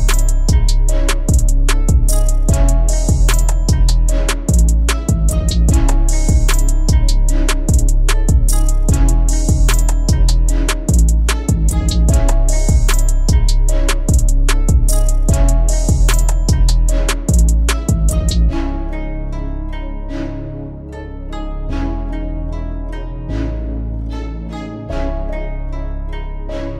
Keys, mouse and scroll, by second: 0.1 click, 0.9 click, 2.3-2.7 drag, 2.7 middle drag, 2.9 click, 3.0-3.6 right drag, 3.6-4.2 middle drag, 4.4 click, 5.4 click, 6.8 click, 7.7-8.1 scroll down 6, 9.2 click, 10.4-11.9 drag, 11.9-12.5 scroll down 2, 12.5 click, 13.5 click, 13.8-17.1 typing, 17.8-19.0 drag, 21.3 click, 23.0-24.2 drag, 25.9 middle click.